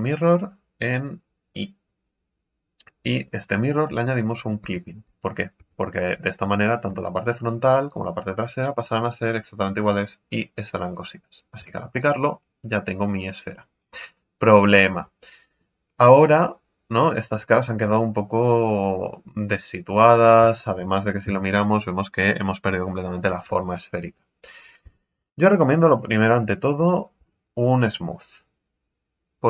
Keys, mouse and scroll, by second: 3.2 click, 3.8 middle click, 4.6 x, 5.6 Tab, 5.8-6.9 middle drag, 6.9 z, 7.4-9.5 middle drag, 9.5-11.6 drag, 11.6 Tab, 11.9-13.9 middle drag, 13.9-14.6 scroll up 4, 14.6-17.4 middle drag, 17.4 scroll down 3, 17.8-19.8 middle drag, 19.8 scroll up 3, 20.2 scroll down 2, 20.6 shift+middle click, 21.2 KP_3, 24.8 a, 27.1 w.